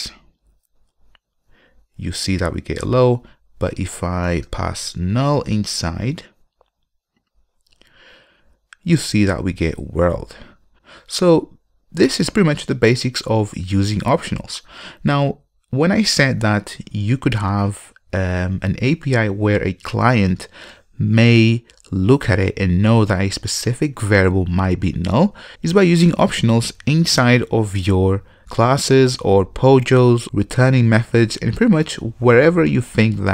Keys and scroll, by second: 0.3 ctrl+F5, 7.5 ctrl+F5.